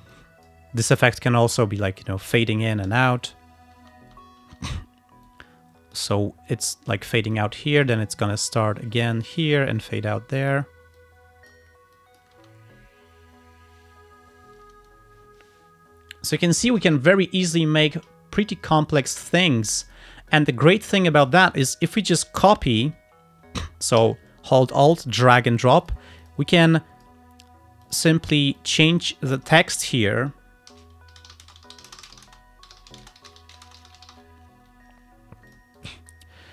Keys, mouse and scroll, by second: 0.2 click, 2.0 click, 2.7 click, 3.0 space, 3.8 space, 5.3 click, 6.5 click, 7.4 click, 9.3 click, 9.9 click, 11.0 click, 12.1 click, 12.5 space, 18.0 space, 19.2 click, 19.9 click, 20.4 click, 21.1 ctrl+scroll down 2, 21.5 ctrl+click, 22.6-25.3 ctrl+drag, 25.6 alt+click, 26.3 alt+click, 26.6 alt+click, 27.9 click, 28.6 click, 29.4 click, 30.5-34.7 typing, 35.6 click, 36.2 click.